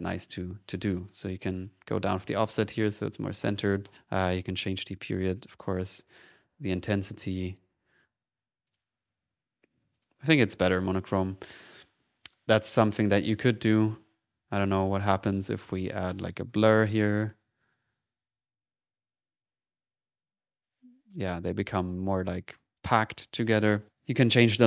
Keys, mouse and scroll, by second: 4.0-5.5 drag, 6.1 click, 7.8-8.5 typing, 8.6 click, 9.9 click, 11.0 middle click, 11.3 click, 11.7 middle click, 11.9 click, 12.0 middle click, 12.8 click, 13.4 click, 13.9 click, 14.8 click, 15.6 right click, 15.6-17.1 typing, 16.0 click, 17.7 click, 19.3 middle click, 19.9-23.9 typing, 22.7 click, 23.3 middle click, 23.7 click, 23.9 Delete, 24.2 middle click, 24.3 click, 24.6 click.